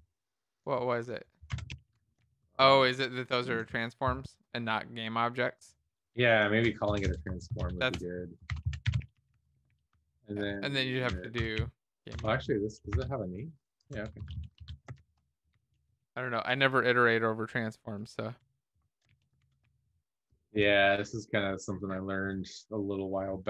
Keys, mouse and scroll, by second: 1.3-2.4 typing, 2.4 ctrl+s, 2.4 Right, 2.7 Right, 2.8 Right, 3.3 Right, 5.6 Left, 6.1 Left, 6.2 Left, 7.5 ctrl+shift+Left, 8.4-10.0 typing, 10.4 Left, 10.5 Left, 10.6 Left, 12.1 BackSpace, 12.9 Escape, 13.0 Down, 13.7 Right, 14.2 Up, 14.3 Up, 14.9 ctrl+shift+Left, 15.5-18.9 typing, 19.3 alt+shift+f, 19.8 ctrl+s, 19.8 Down.